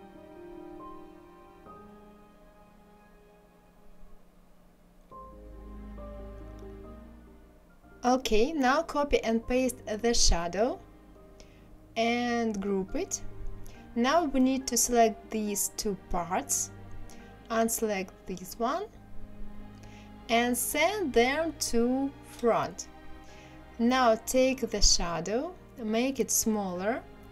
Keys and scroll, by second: 8.8 ctrl+c, 9.3 ctrl+v.